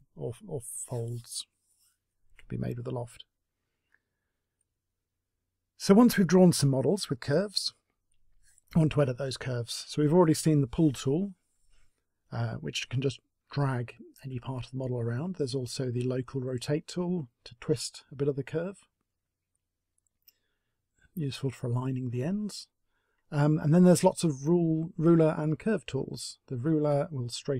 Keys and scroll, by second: 0.0 Delete.